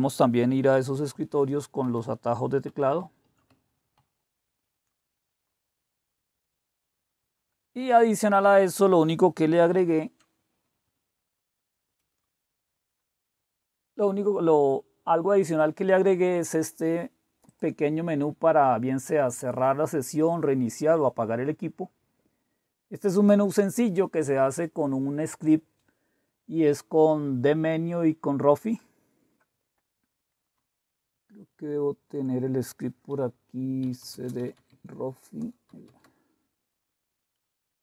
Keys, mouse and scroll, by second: 1.1 super+3, 1.8 super+4, 2.7 super+6, 3.0 super+5, 4.0 super+2, 9.9 super+6, 11.8 super+7, 17.5 click, 28.6 click, 30.5 super+4, 31.1 super+5, 31.6 super+6, 33.5-36.2 typing, 35.4 Return.